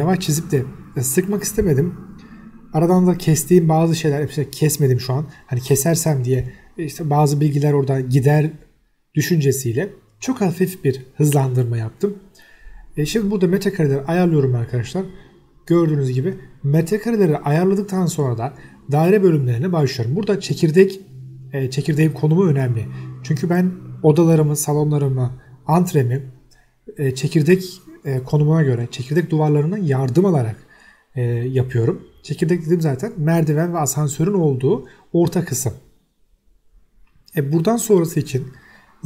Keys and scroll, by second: 0.8 Escape, 3.9 m, 4.0 space, 4.9 2, 4.9 0, 6.4 Escape, 7.8 Escape, 8.8 Escape, 15.3 Escape, 15.7 m, 15.8 space, 16.7 m, 16.8 space, 18.7 1, 19.2 BackSpace, 19.4 5, 19.7 Return, 22.1 Escape, 25.5 m, 25.6 space, 29.8 1, 30.5 BackSpace, 30.9 5, 31.1 Return, 32.9 Escape, 33.8 m, 34.7 5, 34.8 Return, 35.3 Escape.